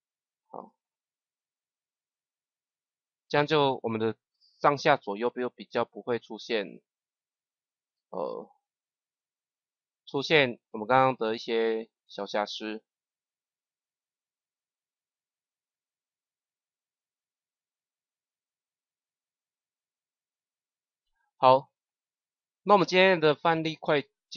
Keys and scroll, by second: 0.5 KP_0.